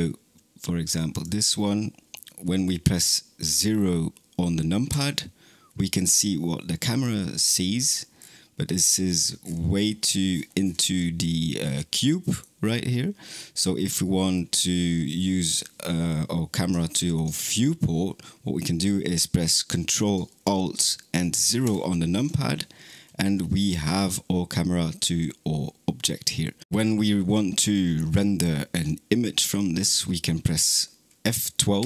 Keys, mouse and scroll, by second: 0.9 click, 4.7 KP_0, 7.7-8.7 scroll down 7, 8.7-9.3 middle drag, 9.3-11.3 scroll down 30, 11.9-21.5 middle drag, 21.5 alt+KP_0, 22.7-23.7 scroll up 6, 23.7-26.5 scroll up 2.